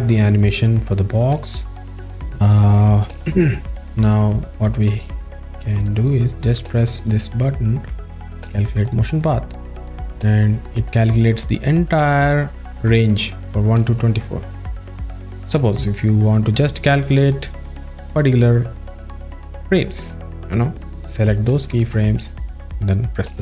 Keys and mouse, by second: 4.0 click, 4.9 click, 8.8 click, 16.8 z, 20.1 click.